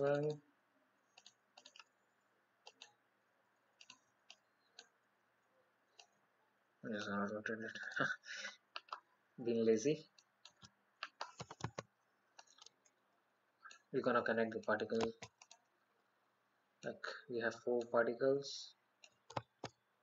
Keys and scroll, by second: 11.6 ctrl+z.